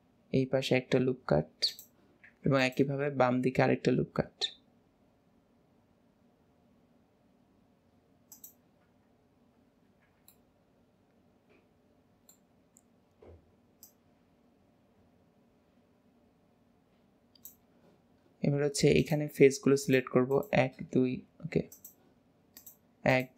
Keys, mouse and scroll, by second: 2.4 ctrl+r, 8.9-9.9 scroll down 2, 9.9 alt+z, 10.4-13.9 middle drag, 13.9 click, 19.1 click, 19.9 click, 20.4 shift+click, 21.8 click, 22.7 click, 23.2 shift+click.